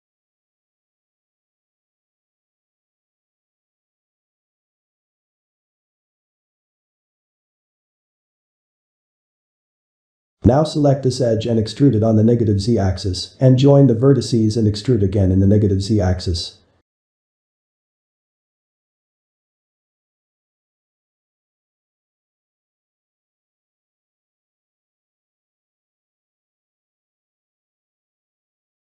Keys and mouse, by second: 3.1-4.2 shift+middle drag, 4.2 click, 5.0 g, 6.5-9.6 middle drag, 9.6 shift+click, 10.0 middle click, 11.0 e, 12.8 middle click, 13.3 g, 14.8 drag, 15.2 shift+click, 15.7 1, 16.3-17.0 middle drag, 17.0 click, 17.7 shift+click, 18.4-19.4 middle drag, 19.9-24.3 shift+middle drag, 24.3 e, 25.5-26.1 middle drag, 26.1 g, 27.2-27.7 middle drag, 27.7 3, 28.3-28.8 ctrl+middle drag.